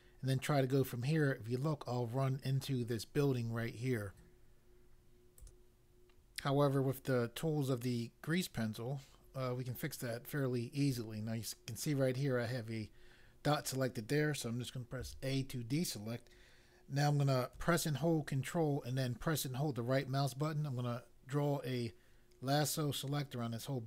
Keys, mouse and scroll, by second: 5.4 click, 14.9 a, 19.9 ctrl+right click.